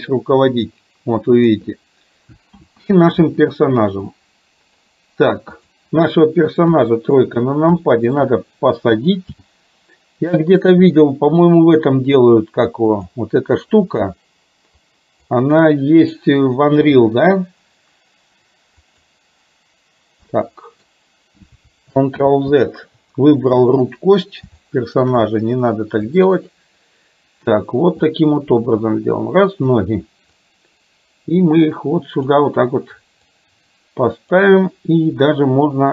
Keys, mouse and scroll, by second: 0.7 click, 2.7 ctrl+z, 4.2-4.9 middle drag, 5.6 click, 6.7 KP_3, 7.9 shift+middle click, 9.5 g, 14.9 click, 17.0 g, 20.5-21.6 middle drag, 22.2 ctrl+z, 24.1-24.5 middle drag, 24.6-25.1 middle drag, 26.2 click, 28.4-29.9 drag, 30.5-32.5 drag, 33.4-34.5 drag.